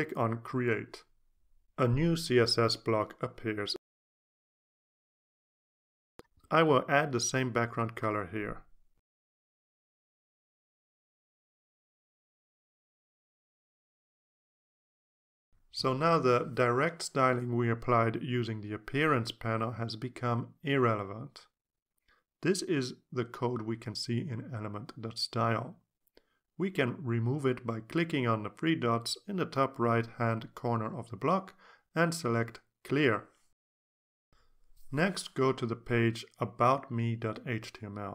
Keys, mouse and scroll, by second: 0.7-1.1 drag, 1.5 click, 5.0 click, 7.9-14.8 typing, 9.4 Tab, 15.0 shift+Return, 16.5 click, 25.1 click, 27.6 click, 28.2 click, 34.8 click, 37.5 click.